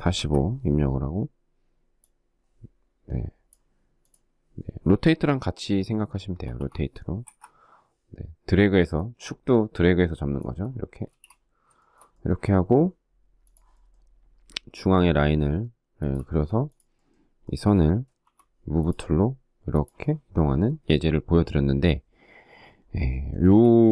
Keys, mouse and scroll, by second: 5.4-6.2 typing, 6.3 Return, 10.2 space, 10.9 shift+middle click, 15.4 space, 17.3 m, 22.5 space.